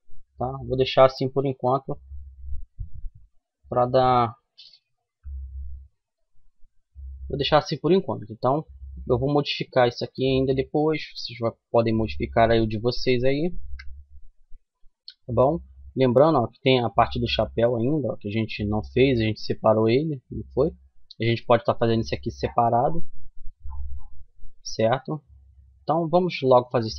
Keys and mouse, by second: 2.6 ctrl+n, 4.2 a, 5.1-7.1 middle drag, 8.1 middle click, 10.1-12.8 middle drag, 12.8 KP_1, 13.6-16.0 middle drag, 17.7-20.3 middle drag, 21.3 middle click, 23.4 middle click.